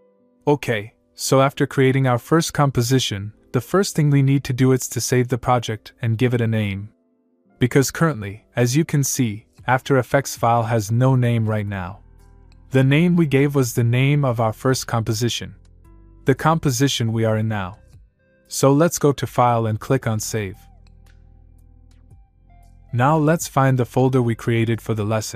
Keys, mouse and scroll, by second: 3.2-5.9 click, 20.3 click, 22.1 click, 23.6 click.